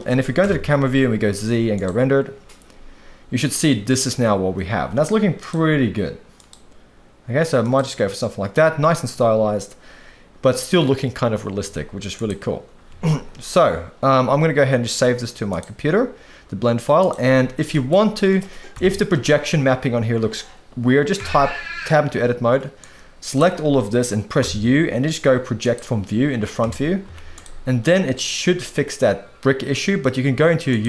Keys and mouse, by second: 0.4 KP_0, 1.2 z, 5.4 click, 11.6 z, 12.9 ctrl+s, 17.0 click, 17.7 middle click, 18.7 KP_1, 21.2 Tab, 22.8 click, 24.4 u, 26.6 Tab, 27.0 z.